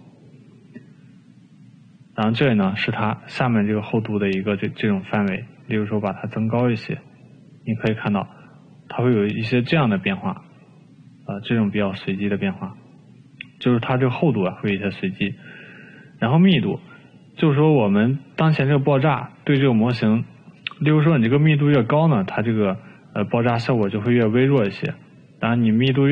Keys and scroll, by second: 22.9 ctrl+z.